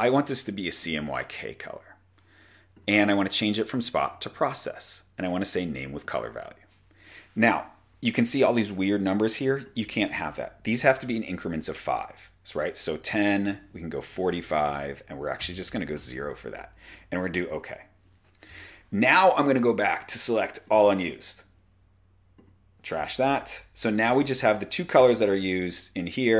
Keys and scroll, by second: 11.1-12.0 typing, 12.7 Tab, 12.9 Tab, 13.8-15.4 typing, 16.0 Tab, 18.5-19.1 typing, 25.0 v.